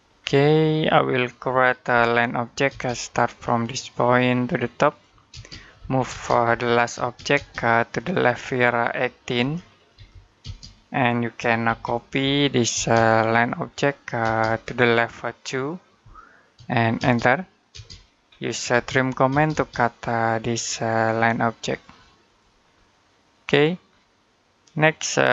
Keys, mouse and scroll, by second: 0.4 middle click, 1.7 l, 2.5 space, 3.8 click, 5.1-6.8 typing, 7.8 click, 9.2-10.2 typing, 11.5-12.6 typing, 13.1 click, 14.1 space, 14.3 click, 15.8 2, 16.8 space, 18.1-18.5 scroll up 1, 18.5-19.1 typing, 19.9 click, 22.5-23.0 scroll down 1, 23.0 middle click, 23.7-24.3 scroll up 1, 24.4 middle click.